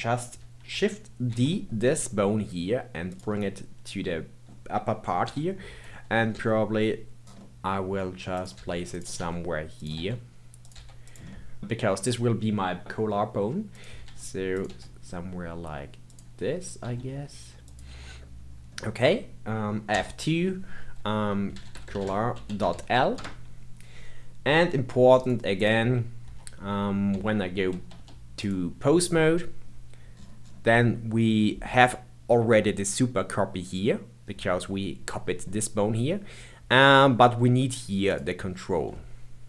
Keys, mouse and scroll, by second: 1.2 shift+d, 3.3-6.3 middle drag, 5.2 KP_7, 6.3 g, 8.5 g, 9.1 r, 9.9 s, 11.3 middle click, 14.0 r, 14.6 g, 18.5-18.9 scroll up 2, 18.9-19.9 scroll down 1, 19.9 F2, 21.8 l, 25.2 click, 26.2 Tab, 27.0 Tab, 27.7 ctrl+Tab, 30.1-33.4 scroll down 12, 38.1 click.